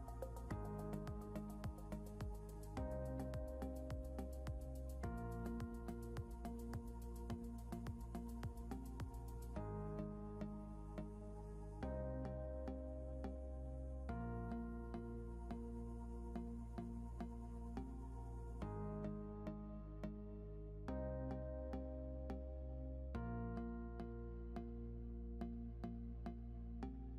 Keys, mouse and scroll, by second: 3.1 click, 7.0 Right, 11.3 click, 13.8 click.